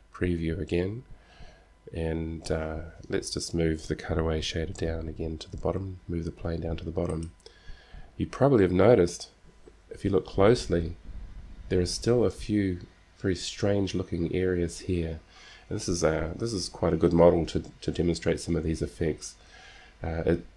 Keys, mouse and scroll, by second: 0.0 shift+z, 4.9 g.